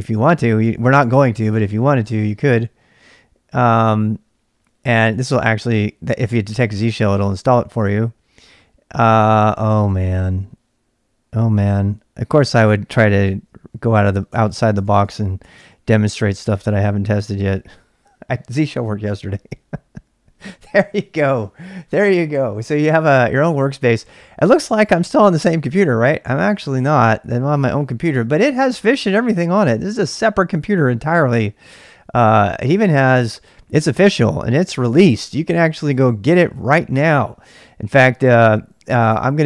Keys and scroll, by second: 0.0-2.9 typing, 9.6 ctrl+[, 9.8 k, 11.6 k, 12.4 k, 13.1 ctrl+c, 13.4-14.4 typing, 14.7 Return, 15.1 Return, 15.4 Return, 15.6 Return, 16.6 Return, 23.0-23.9 typing, 25.1-29.2 typing.